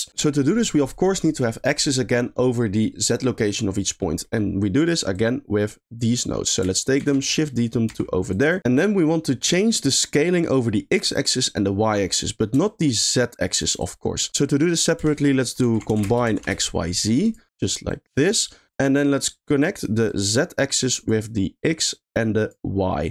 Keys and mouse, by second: 3.6 middle click, 5.2 click, 6.4 middle click, 6.9 shift+d, 7.5 middle click, 7.9 g, 8.6 click, 8.9 middle click, 12.6 shift+click, 14.1 middle click, 14.3 g, 15.1 shift+a, 17.8 drag, 18.9 middle click, 20.0-21.0 drag, 21.8-22.5 drag.